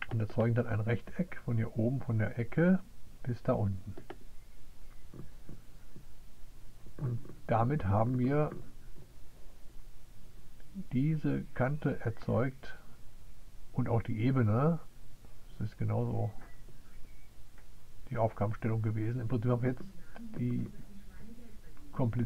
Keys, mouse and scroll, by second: 2.2 click, 3.4 click.